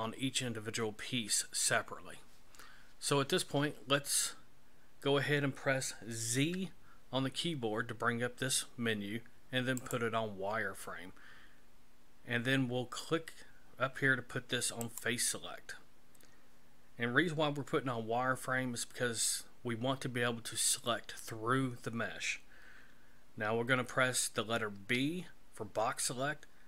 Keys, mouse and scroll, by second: 6.3 z, 14.8 click, 24.7 b.